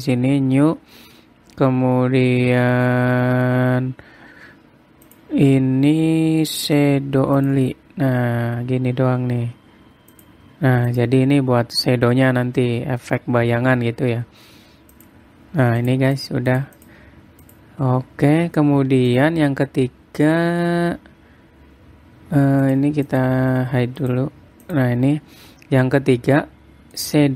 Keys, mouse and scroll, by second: 1.0-4.2 scroll down 29, 5.6 click, 10.7 click, 11.5 click, 15.5 click, 16.4 click, 16.7 click, 17.1 click, 17.4 click, 18.0 click, 19.7 click, 23.2 click, 23.7 click, 24.6 click, 25.2 click, 26.3-26.6 scroll down 2, 26.6 middle click.